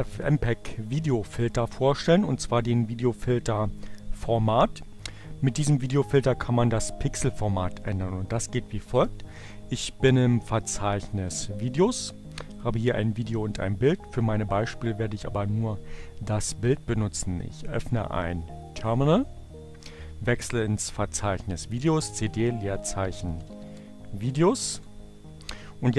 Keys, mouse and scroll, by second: 12.2 click, 13.0 click, 21.0-22.1 drag, 21.9-25.9 typing.